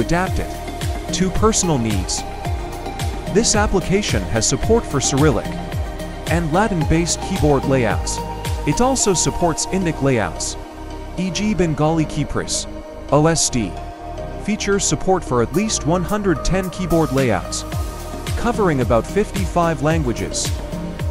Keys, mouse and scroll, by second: 1.8 click, 7.1-9.1 typing, 10.8-12.7 typing.